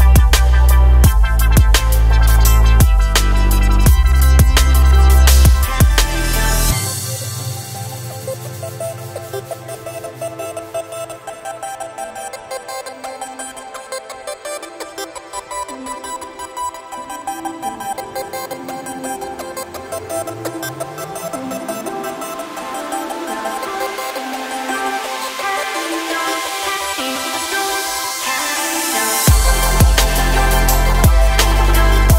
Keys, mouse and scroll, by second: 0.2-1.4 typing, 0.3 click, 0.5 click, 0.9 click, 1.1 shift+click, 1.3 shift+click, 2.4 click, 2.6 e, 3.4 f, 3.6 click, 3.7 shift+middle click, 3.8 e, 4.5 click, 4.7 shift+click, 4.9 alt+m, 5.3 2, 5.4 click, 5.7 shift+middle click, 6.2 click, 6.4 shift+click, 6.6 f, 6.7 shift+click, 6.9 f, 7.0 shift+middle click, 7.2 alt+click, 7.3 scroll down 1, 7.4 shift+middle click, 7.6 s, 8.5 shift+middle click, 8.7 scroll up 1, 8.9-10.4 typing, 9.0 click, 10.1 click, 11.0 click, 11.2 shift+click, 11.5 shift+click, 11.6 scroll down 2, 11.7 shift+middle click, 11.9 shift+click, 12.1 shift+click, 12.4 shift+click, 12.5 shift+click, 12.7 e, 13.8 shift+click, 14.0 shift+click, 14.0 x, 14.3 shift+middle click, 14.4 scroll up 1, 14.5 shift+click, 14.7 shift+middle click, 15.0 shift+click, 15.1 g, 15.8 shift+middle click, 16.0 scroll up 1, 16.4 click, 16.5 click, 16.7-21.7 typing, 17.1 shift+click, 17.8 click, 18.5 click, 18.9 shift+middle click, 19.0 click, 19.8 shift+middle click, 19.9 scroll up 1, 20.1 click, 20.6 click, 20.8 click, 21.6 click, 22.4 click, 22.8 shift+middle click, 22.9 click, 23.0-25.3 typing, 23.4 click, 24.0 shift+middle click, 24.1 click, 24.3 shift+middle click, 24.7 click, 25.0 click, 25.3 click, 25.7 shift+middle click, 26.1 scroll down 3, 26.2 middle click, 26.4 3, 26.5 shift+middle click, 26.6 click, 26.8 shift+click, 27.0 middle click, 27.2 a, 27.3 2, 28.4 scroll up 1, 28.6 3, 28.7 click, 29.2 shift+click, 29.3 shift+click, 29.4 shift+click, 29.6 shift+middle click, 29.9 e, 30.7 shift+click, 30.9 shift+click, 31.0 shift+click, 31.2-32.1 typing, 31.4 middle click, 31.8 click, 31.9 shift+click.